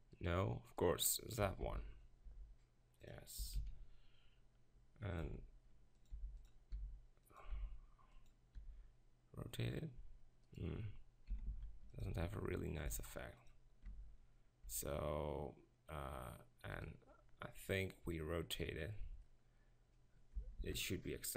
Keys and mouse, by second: 1.6 ctrl+l, 2.3 g, 3.4 s, 5.2 s, 6.1 g, 6.7 s, 7.5 s, 8.6 r, 11.3 s, 12.1 g, 12.9 s, 13.8 Tab, 14.7 Tab, 20.6 ctrl+l.